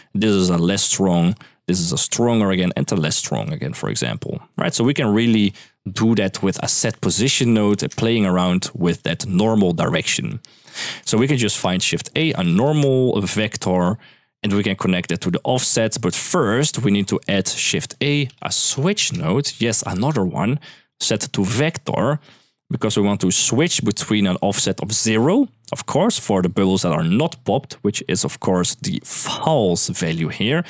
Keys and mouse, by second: 0.0-5.2 typing, 0.1 click, 0.7 click, 6.1 middle click, 6.4 click, 6.7 shift+a, 10.3 middle drag, 11.2 shift+a, 13.5 click, 14.6 middle click, 15.6 middle click, 16.2 click, 16.9 middle click, 17.6 shift+a, 19.5 click, 20.6-21.5 drag, 22.3 click, 23.1 click, 27.7 middle click.